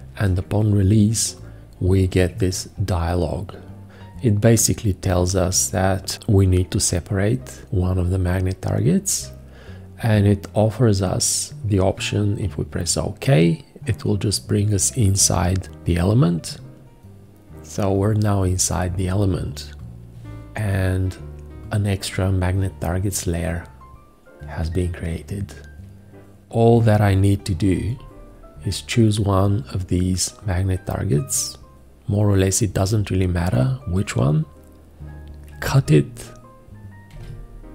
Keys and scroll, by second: 27.8 v, 37.1 ctrl+x.